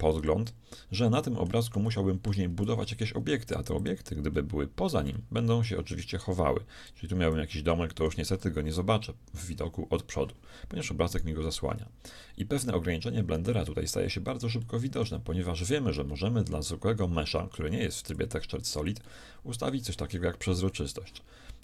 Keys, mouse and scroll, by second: 2.8 shift+a, 4.4-6.9 middle drag, 6.9-8.9 drag, 7.7 right click, 9.1 KP_7, 9.6 KP_1, 11.2-13.1 right drag, 14.6-18.1 shift+middle drag, 18.1-19.8 drag, 19.0 right click, 19.8 middle click.